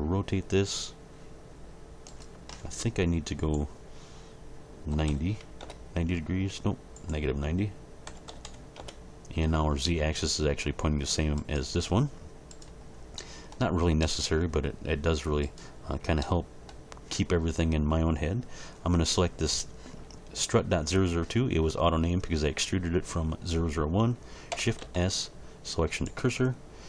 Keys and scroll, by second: 4.9 9, 5.1 0, 5.6 Return, 8.0 -, 8.3 9, 8.4 0, 8.8 Return, 24.8 shift+s.